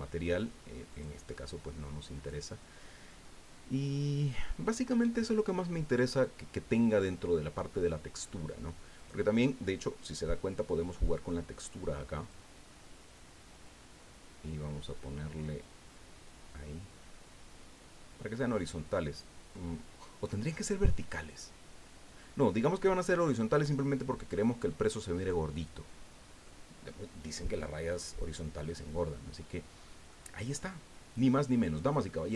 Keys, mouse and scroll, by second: 0.9 click, 3.2-3.8 scroll down 2, 9.0 click, 12.3-19.7 drag, 23.2-25.9 drag, 26.0-26.4 scroll down 1, 26.4-27.7 drag, 27.9-28.2 scroll up 2, 28.6-30.3 drag, 30.4 scroll down 2, 30.6-32.2 drag.